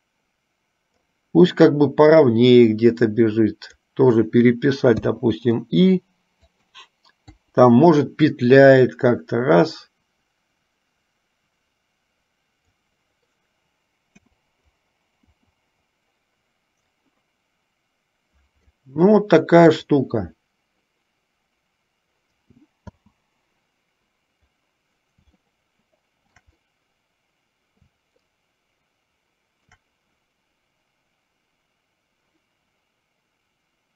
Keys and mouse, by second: 2.4-4.2 drag, 5.2 i, 6.6 click, 7.5 Delete, 8.6-13.0 drag, 14.2 KP_0, 19.9 click, 23.0 space, 25.7-26.7 shift+middle drag, 28.6-30.1 shift+middle drag.